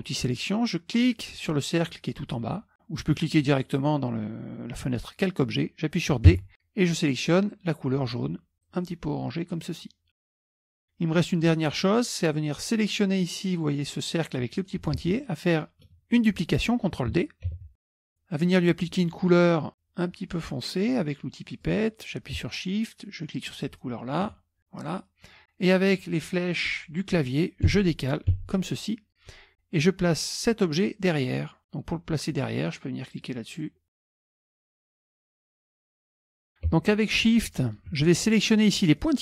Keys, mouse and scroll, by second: 1.0 click, 6.4 d, 8.6 click, 10.6 click, 12.5 click, 13.5-14.9 drag, 15.0 ctrl+z, 17.6 ctrl+d, 21.6 click, 23.7 shift+click, 24.9 click, 27.8 Right, 28.4 Down, 33.2 click, 35.8 KP_Subtract, 38.9 shift+click.